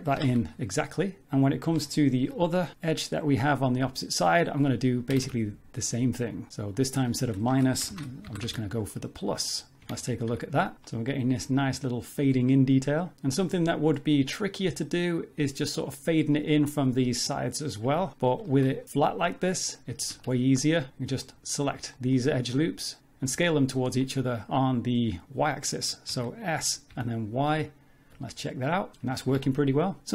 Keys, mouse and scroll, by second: 1.3 middle click, 1.9 shift+middle click, 2.4 middle click, 2.7 click, 2.9 middle click, 4.0 click, 4.3 middle click, 5.1 g, 6.7 click, 9.4 middle click, 9.8 shift+middle click, 9.8 Tab, 10.1-10.7 scroll down 2, 10.3 z, 10.8 middle click, 11.3 scroll down 2, 17.9 Tab, 18.1 middle click, 18.5 shift+middle click, 18.8-19.2 scroll up 4, 19.9 z, 20.2 shift+middle click, 20.3 scroll up 2, 20.6 middle click, 21.2 alt+click, 21.4 scroll down 1, 21.9 middle click, 22.3 middle click, 22.7 alt+shift+click, 22.9 middle click, 25.5 s, 28.1 Tab, 28.1 middle click, 28.1-28.9 scroll down 5, 28.9 z, 29.1 scroll down 2, 29.2 shift+middle click, 29.5 middle click.